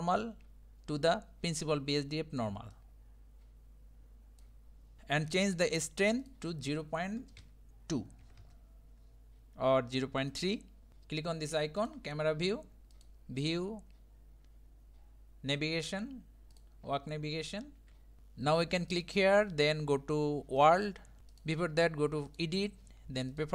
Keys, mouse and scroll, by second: 0.8-2.7 shift+middle drag, 2.7-4.5 drag, 5.0-5.3 scroll up 2, 8.4-10.9 drag, 11.8 click, 21.4 click.